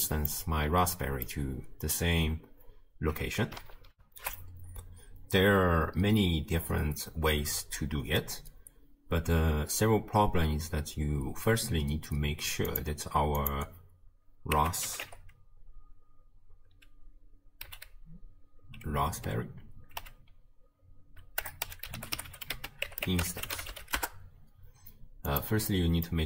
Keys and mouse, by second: 0.4 middle click, 0.5-1.4 drag, 3.9 ctrl+alt+shift+q, 13.6-24.0 drag, 22.3 r, 25.3 click, 25.8 click.